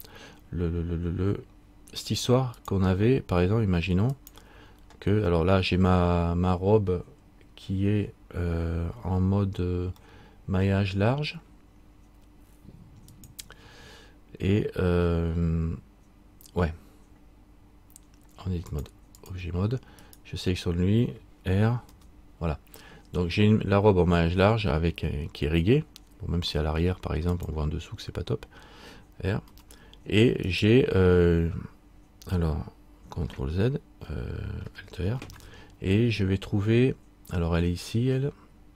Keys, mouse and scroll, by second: 2.7 click, 4.4 click, 10.2 middle click, 13.2 click, 18.8 click, 19.4 click, 20.2 right click, 22.0 r.